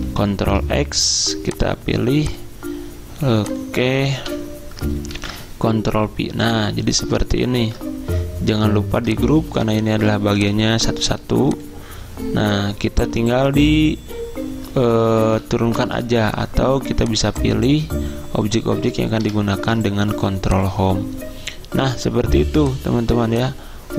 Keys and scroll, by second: 0.4 ctrl+x, 4.3 Delete, 5.2 ctrl+v, 7.7 ctrl+g, 15.1 ctrl+Page_Down, 15.2 ctrl+Page_Down, 19.4 ctrl+Home.